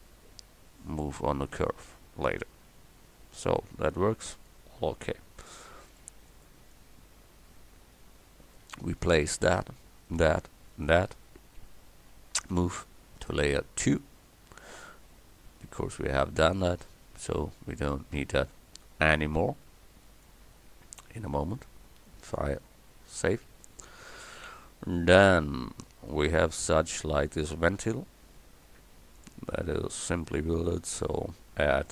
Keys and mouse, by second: 4.5-6.2 drag, 12.5 m, 17.0 KP_1, 22.2-26.1 drag, 30.0-31.9 drag.